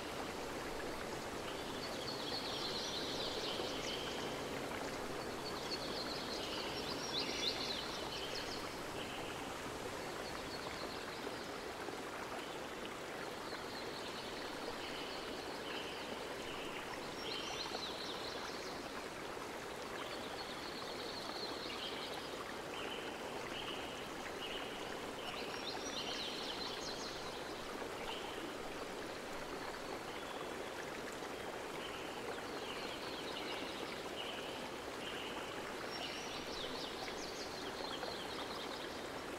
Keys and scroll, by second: 1.0 z, 2.0 ctrl+c, 2.6 ctrl+shift+v, 19.7 ctrl+c, 20.1 ctrl+shift+v, 34.7 ctrl+v, 35.2 ctrl+z.